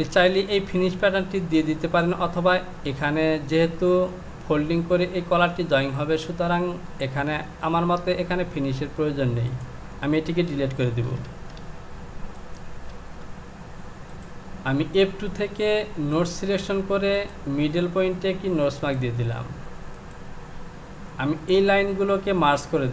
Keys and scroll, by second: 10.9 shift+z.